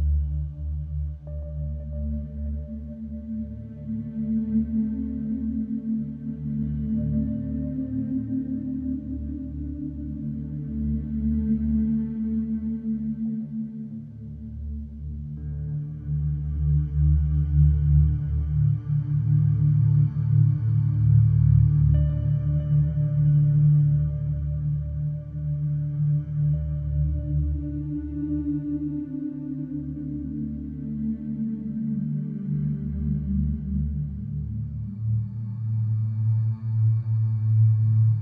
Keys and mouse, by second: 0.6 Escape, 8.3 KP_7, 8.9 alt+z, 10.0-11.3 middle drag, 11.8-13.1 middle drag, 13.9 KP_1, 15.5-17.5 middle drag, 18.1 Delete, 19.2 Tab, 19.5 alt+z, 23.2 middle click, 26.8 ctrl+a, 36.9 middle click, 37.6 Tab.